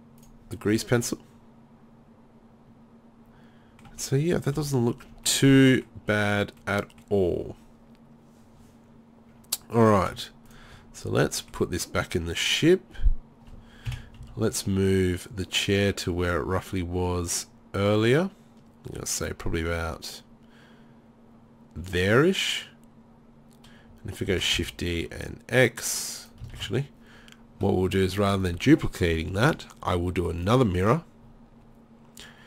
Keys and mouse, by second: 0.2-1.9 drag, 1.9 middle click, 4.5 KP_3, 13.9 KP_7, 14.2 z, 24.3 shift+d, 26.3 click, 26.6 ctrl+z, 28.1-29.8 drag.